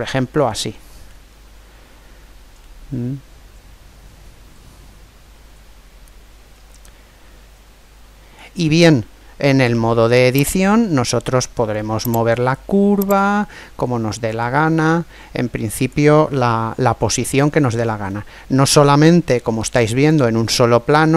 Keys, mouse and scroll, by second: 0.2-2.2 middle drag, 2.6-4.7 middle drag, 9.7 Tab, 12.0 right click, 13.0-14.7 drag, 16.9-21.1 middle drag.